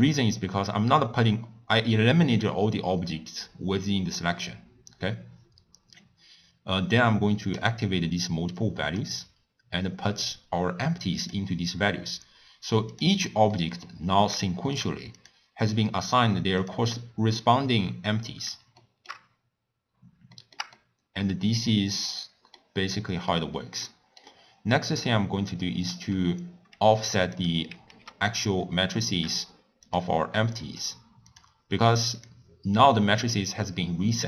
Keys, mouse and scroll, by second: 7.8 click, 11.5 click, 13.0 click, 13.5-14.0 middle drag, 14.0-14.5 scroll up 1, 14.5-15.2 shift+middle drag, 15.2 click, 16.1 click, 16.7 click, 18.8-19.3 shift+middle drag, 19.3 scroll up 1, 19.5-20.3 scroll down 3, 20.3-27.9 shift+middle drag, 27.9 ctrl+x, 29.9 click, 32.2 click.